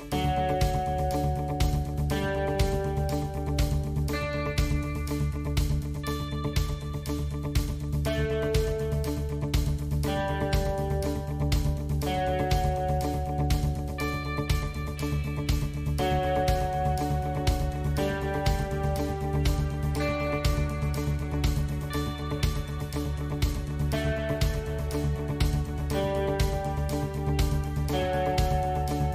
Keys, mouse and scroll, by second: 2.5 ctrl+r, 4.5 ctrl+r, 7.2 ctrl+z, 8.2 ctrl+r, 11.8 ctrl+r, 16.4 ctrl+r, 18.5 ctrl+r, 20.2 ctrl+r, 21.6 ctrl+r, 23.7 ctrl+r, 26.3 ctrl+r, 28.4 ctrl+r.